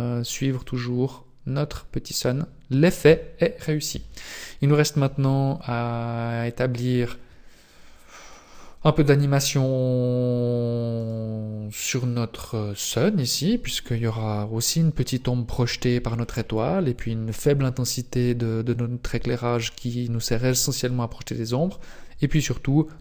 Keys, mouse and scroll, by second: 0.5 click, 5.5-9.3 scroll down 5, 11.0 right click.